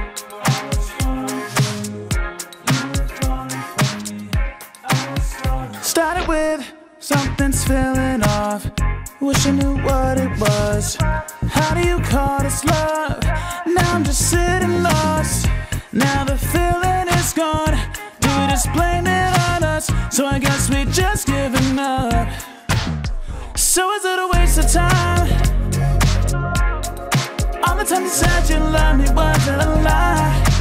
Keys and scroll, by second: 0.1 ctrl+g.